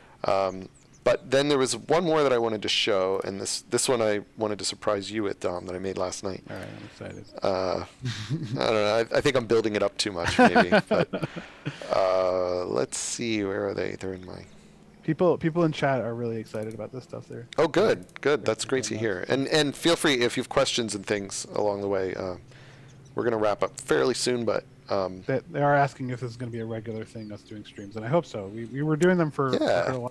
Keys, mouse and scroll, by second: 2.2 click, 6.5 click, 7.9 scroll down 1, 12.8 scroll up 1, 13.1-14.5 scroll down 1, 16.4 click, 30.0 click.